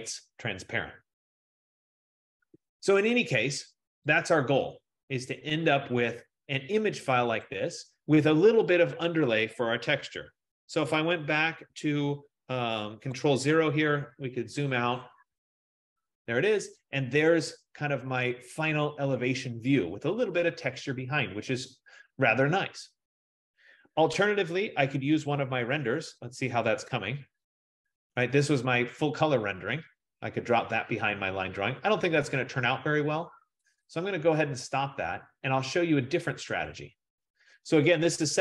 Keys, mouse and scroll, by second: 4.4 click, 7.6 click, 13.2 click, 13.5 ctrl+0, 25.9 click, 28.0 click, 29.2 middle click, 30.7 middle click, 34.2 click, 36.8 click.